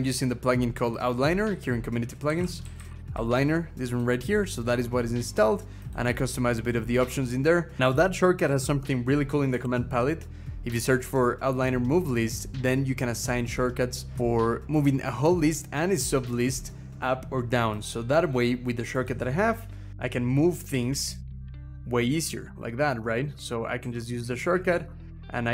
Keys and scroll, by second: 1.6-3.6 typing, 6.8 Escape, 6.9 Caps_Lock, 9.4 ctrl+v, 19.9 Down, 20.5 Up, 20.7 Up, 20.9 Up, 21.2 Up, 21.9 ctrl+shift+Up, 22.3 ctrl+shift+Down, 22.5 ctrl+shift+Down, 23.3 Down, 23.6 Down, 24.0 ctrl+shift+Up, 24.3 ctrl+shift+Up, 24.9 Up, 25.3 Up, 25.4 Up.